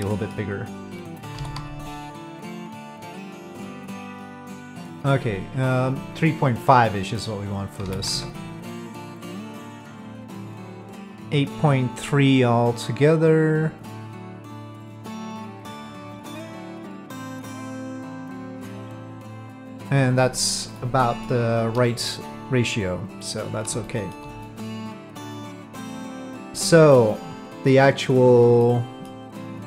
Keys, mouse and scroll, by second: 1.4 s, 6.7 click, 7.8 s, 20.8 middle click, 22.1-23.3 middle drag, 23.8 shift+middle drag, 24.4-25.3 middle drag, 25.5-26.5 middle drag, 26.9-27.7 middle drag, 28.6 middle click.